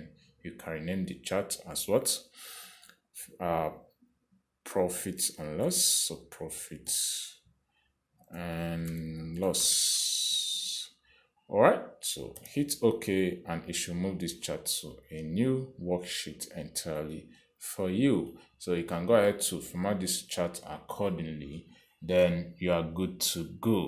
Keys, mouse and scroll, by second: 6.7-12.5 typing, 10.2 Caps_Lock, 10.9 Caps_Lock, 13.7 Return.